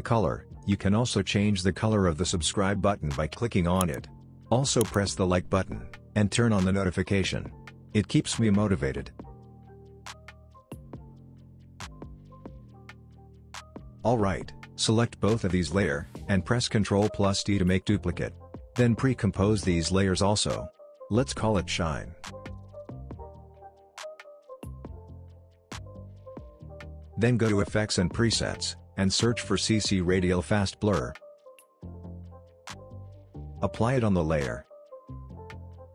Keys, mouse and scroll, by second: 2.4-3.1 click, 3.3 alt+scroll down 1, 3.5 click, 3.5 click, 4.8 space, 7.8-8.3 scroll up 1, 11.1 click, 15.4 ctrl+click, 16.6 ctrl+d, 17.8-18.4 click, 18.7 right click, 19.4 click, 20.6-22.2 typing, 23.3 click, 30.2-31.0 typing, 32.1-33.4 typing, 34.4 click.